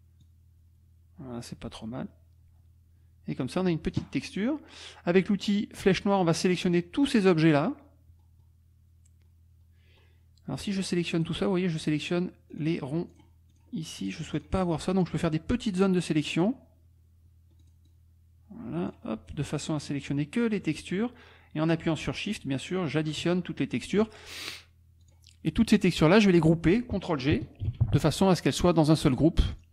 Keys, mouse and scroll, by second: 0.2-4.1 drag, 5.8 click, 6.6-11.4 drag, 12.6 click, 13.2 click, 13.5 click, 14.0 click, 14.3 click, 15.2-16.6 drag, 17.7-19.1 drag, 19.3 shift+click, 20.5-21.8 shift+drag, 22.3 shift+click, 25.0 click, 27.9 ctrl+g, 29.5 click.